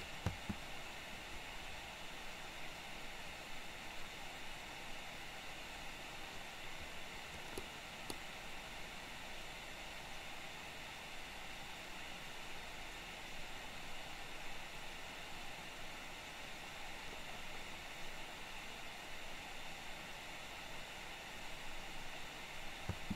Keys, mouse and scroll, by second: 0.3 space, 7.6-8.1 middle drag, 22.9 space.